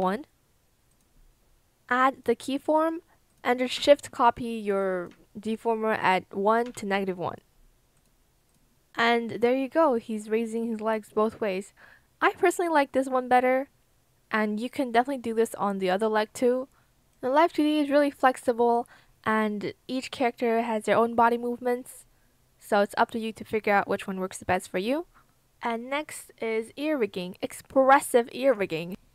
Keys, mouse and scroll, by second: 3.7 ctrl+shift+c, 6.6 ctrl+shift+v.